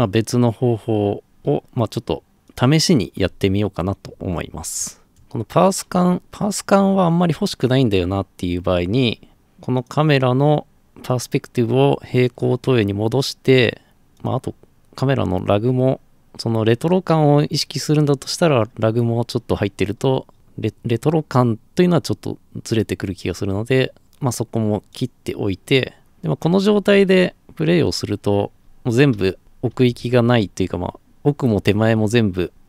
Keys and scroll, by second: 3.2 alt+f, 28.6-32.6 typing.